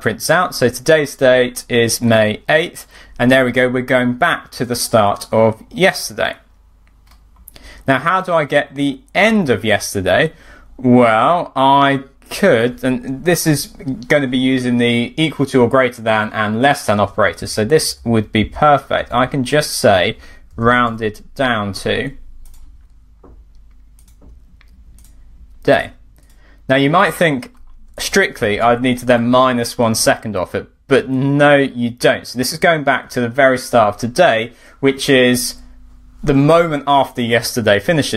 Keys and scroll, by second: 7.1 alt+super+fn+Up, 17.3 BackSpace, 18.8 BackSpace, 27.5 alt+super+fn+Down, 28.5 super+r, 37.7 alt+super+fn+Up.